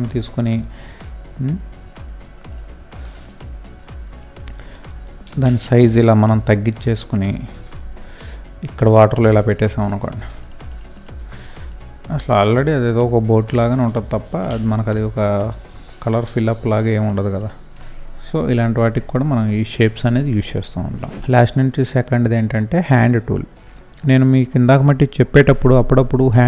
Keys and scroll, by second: 4.9 ctrl+t, 10.2 ctrl+space, 10.8 ctrl+space, 11.0 ctrl+space, 14.0 ctrl+t, 18.7 ctrl+0.